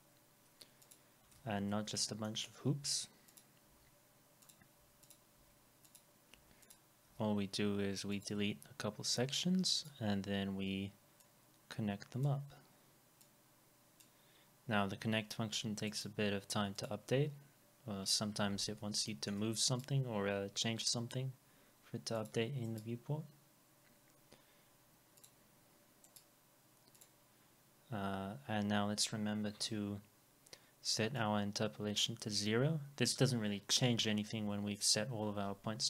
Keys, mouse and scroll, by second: 1.4 alt+x, 2.2 middle click, 2.8 Delete, 15.9 right click, 18.1 scroll up 1, 19.1 alt+middle click, 19.7 right click, 22.7 right click, 26.1 right click, 28.0 scroll down 1, 29.6 F4.